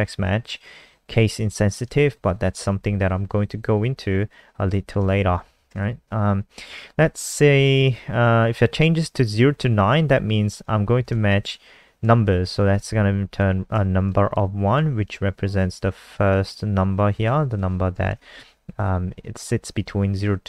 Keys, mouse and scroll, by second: 2.2 Left, 5.6-7.0 typing, 10.5 click, 11.0 ctrl+s, 12.0 typing, 12.6 ctrl+s, 13.4 F5, 14.3 alt+click, 17.2 click, 17.5 click, 18.1 ctrl+s.